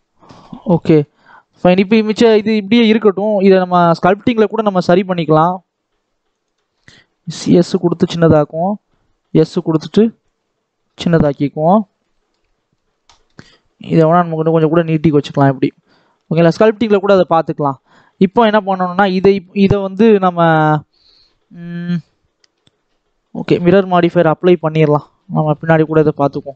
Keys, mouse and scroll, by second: 0.3 scroll down 1, 0.6-2.2 middle drag, 2.2 scroll up 1, 2.4 middle click, 2.8-3.5 scroll up 1, 3.5 alt+a, 3.8-5.0 alt+drag, 5.0 s, 7.2-8.6 drag, 8.6 s, 10.1-11.2 drag, 11.2-11.6 scroll down 6, 11.6-12.8 middle drag, 12.8 scroll up 1, 13.0-14.0 shift+middle drag, 14.0 click, 15.0-16.0 middle drag, 16.0 scroll down 2, 16.2 shift+middle click, 16.7 scroll up 2, 17.0 shift+middle click, 17.4 Tab, 17.6 middle click, 18.4-18.9 scroll up 1, 18.9 click, 23.2-25.3 drag, 25.3 middle click, 25.7 click, 26.2 shift+middle click.